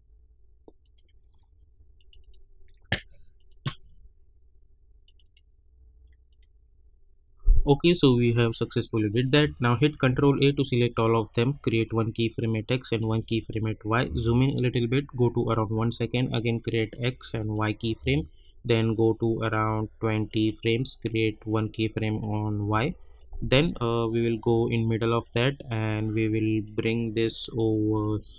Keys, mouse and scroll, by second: 0.8 click, 2.2 right click, 3.3 click, 3.9 scroll down 1, 5.0 click, 5.2 right click, 6.3 click, 6.7-7.3 scroll down 1, 7.8 scroll up 1, 9.9 ctrl+a, 11.8 click, 14.0 =, 15.4 click, 17.9 =, 20.2-28.3 drag.